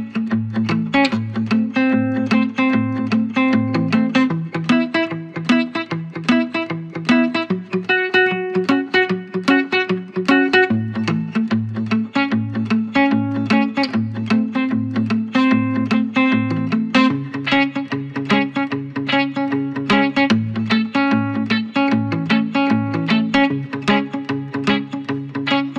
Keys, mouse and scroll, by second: 2.3 ctrl+click, 6.7 click, 16.0 click, 20.2 click, 24.1 click, 25.1 scroll down 1.